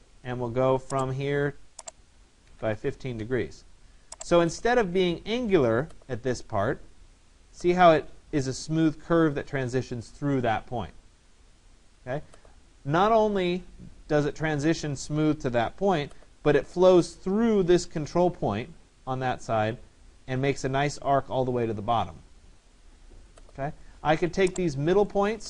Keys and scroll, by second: 2.5 1, 2.6 5, 3.2 Return.